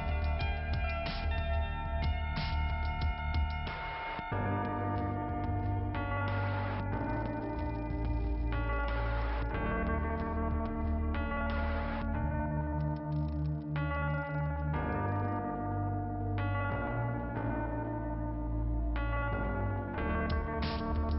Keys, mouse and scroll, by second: 0.6 click, 1.4 click, 1.9 click, 1.9 click, 2.7 click, 7.1 click, 7.6 click, 8.0-8.5 scroll down 2, 8.5 click, 9.8 middle click, 12.4 click, 13.4 middle click, 18.9-19.7 scroll up 2, 19.7 click.